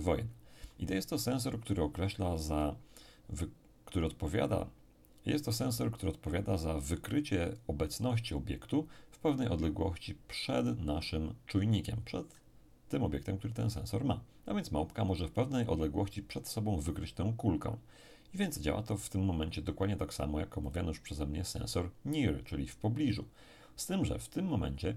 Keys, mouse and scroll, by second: 20.7 click.